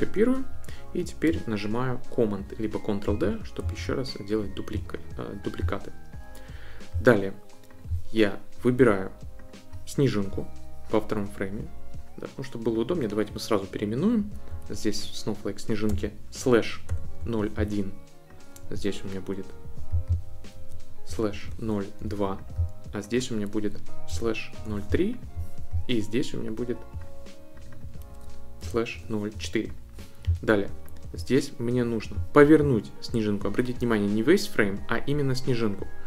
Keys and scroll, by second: 3.0 super+d, 3.8 super+d, 14.5 Right, 15.9 /, 16.8 0, 17.2 1, 20.5 Right, 21.1 /, 21.4 0, 22.1 2, 23.5 Right, 23.8-25.3 typing, 28.1 Right, 28.3-29.9 typing.